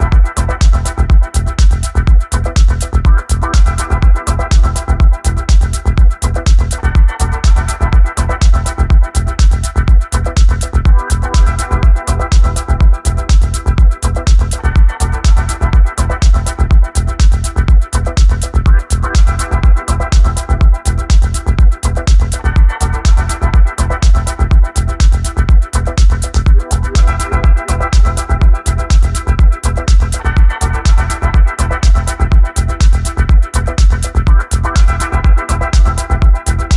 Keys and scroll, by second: 0.0-0.9 typing, 1.4 Down, 1.6 Return, 8.8-9.7 typing, 12.0 w, 12.1 Escape, 13.1 e, 17.6 1, 18.2 f, 24.4 Escape, 25.3 s, 26.0 d, 34.0-35.2 typing, 35.7 Down, 36.0 Return.